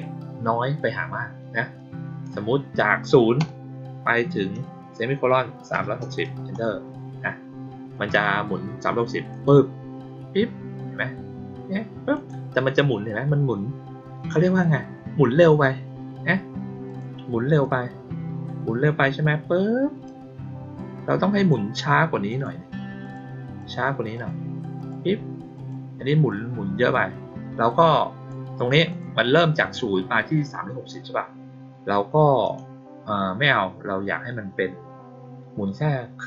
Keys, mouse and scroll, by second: 1.7 click, 9.2 click, 12.1 click, 16.8 click, 17.5-20.0 drag, 21.3 click, 22.2 click, 22.9 click, 23.5 click, 24.1 click, 24.7 click, 25.5 click, 26.2-28.2 drag, 28.8 click, 32.4 click.